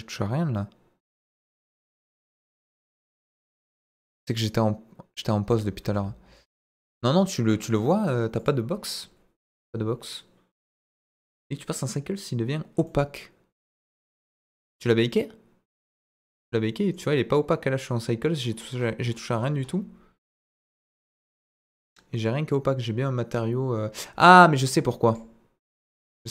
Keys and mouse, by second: 1.7 click, 4.1 click, 5.5 space, 5.8 space, 6.4 click, 8.4 click, 12.8-13.6 middle drag, 14.8-16.9 drag, 20.5 click, 20.8 click, 25.1 drag, 26.0-26.3 drag.